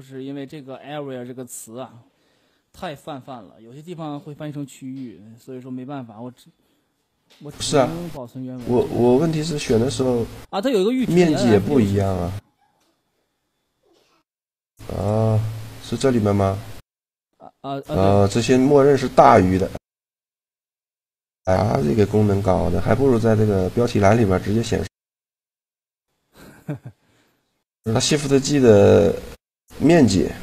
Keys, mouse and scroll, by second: 3.1-5.0 middle drag, 10.5-12.2 middle drag, 14.7-16.6 drag, 18.0-19.9 drag, 20.6-21.8 middle drag, 21.8 n, 26.4-27.8 right drag, 27.4 shift+g, 30.2-30.4 drag.